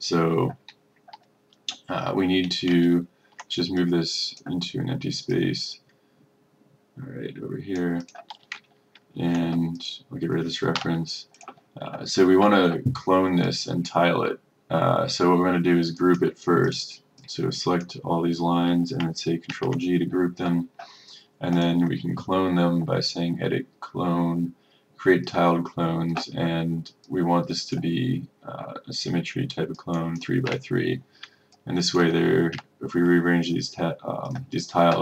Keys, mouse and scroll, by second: 3.2 ctrl+scroll, 3.9-8.1 drag, 8.8-9.1 ctrl+scroll, 9.8 click, 10.9 Delete, 11.4-16.0 drag, 16.0 right click, 16.7-18.7 drag, 19.6 ctrl+g, 21.6-28.8 drag, 30.6 KP_3, 31.6 click, 32.6 KP_3, 34.4-35.0 drag.